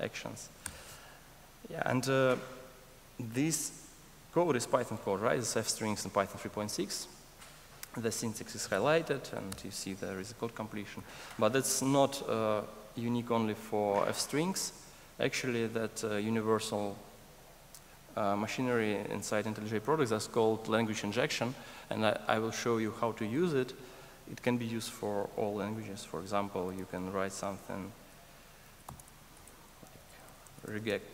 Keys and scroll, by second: 28.8 alt+BackSpace.